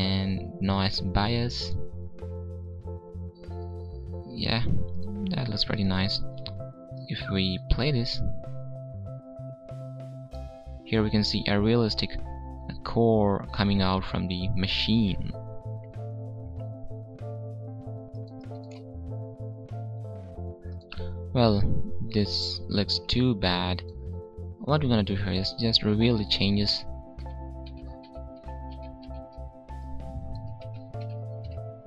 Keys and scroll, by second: 26.5 ctrl+z.